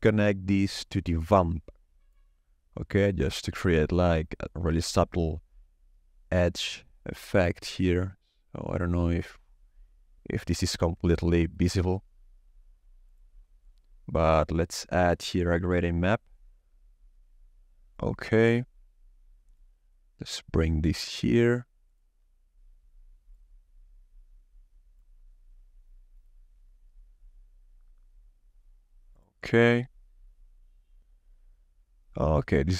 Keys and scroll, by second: 15.0 shift+d.